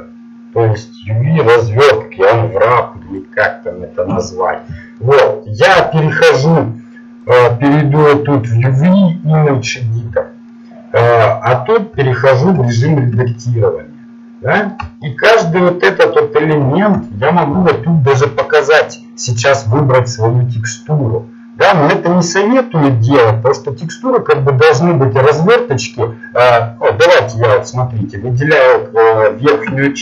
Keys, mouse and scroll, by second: 4.1 Delete, 9.7-11.5 middle drag, 11.9 Tab, 12.7-16.5 middle drag, 19.0 click, 27.8 middle click, 28.9 middle click, 29.6 ctrl+Tab.